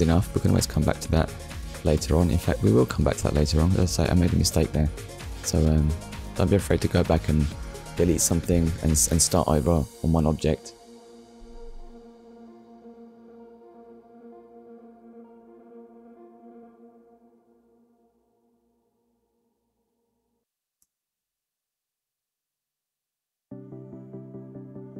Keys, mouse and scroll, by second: 2.7 scroll up 1, 3.4 shift+middle click, 4.6 ctrl+s, 9.6 click, 11.0 click, 11.5 middle click, 12.3 click, 14.8 KP_1, 17.5 click, 19.5 click, 22.0 middle click, 23.8 click.